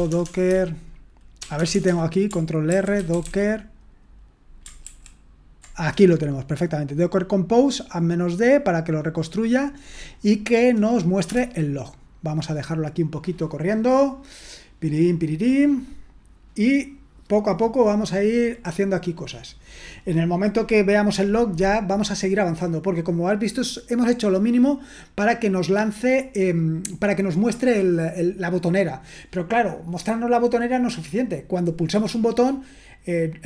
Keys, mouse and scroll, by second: 0.0-1.5 typing, 2.7 ctrl+r, 2.7-3.6 typing, 4.9 ctrl+r.